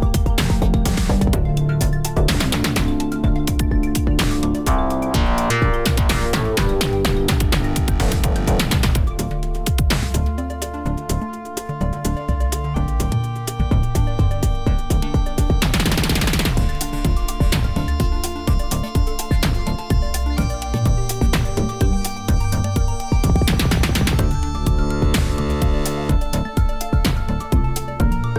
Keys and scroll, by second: 0.6 Tab, 4.2 1, 19.5 shift+d, 21.9 Escape, 22.1 g, 22.4 z, 27.0 r, 27.4 z.